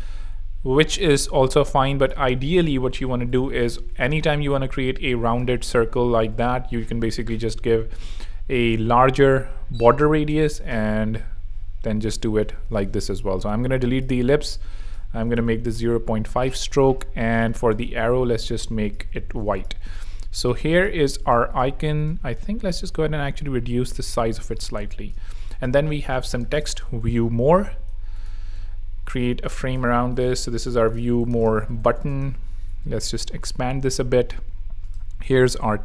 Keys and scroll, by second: 3.4 5, 3.9 Tab, 8.7 f, 9.3 Tab, 12.0 Escape, 13.2 BackSpace, 15.0-16.1 typing, 18.9 super+f, 19.3 Tab, 19.8 z, 21.0 z, 21.8 super+z, 24.0 alt+h, 24.7 alt+space, 25.0-27.6 typing, 28.4 alt+super+x, 28.6 alt+super+g, 29.4 alt+super+r, 30.0-32.5 typing, 33.9 super+v, 34.9 shift+super+v.